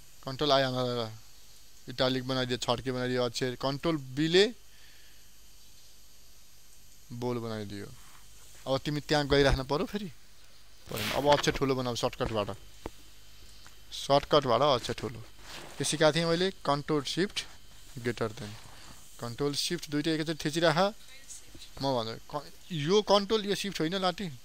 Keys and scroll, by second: 1.3 ctrl+i, 6.6 ctrl+b.